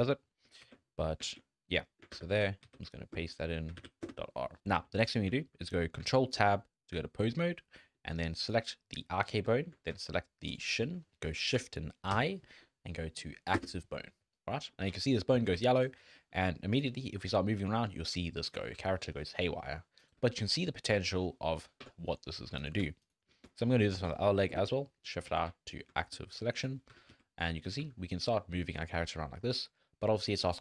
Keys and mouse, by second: 0.0 click, 0.6 ctrl+v, 1.3 ctrl+z, 2.1 F2, 4.6 shift+drag, 4.9 click, 5.3 shift+click, 6.4 ctrl+Tab, 7.9 drag, 9.5 shift+drag, 10.5 shift+click, 12.1 shift+i, 14.6 drag, 15.0 drag, 15.5 alt+a, 15.8 click, 16.2 shift+drag, 17.0 click, 17.2 g, 18.7 g, 22.0 click, 23.9 shift+i, 25.3 alt+a, 26.0 shift+drag, 26.9 g, 27.8 g.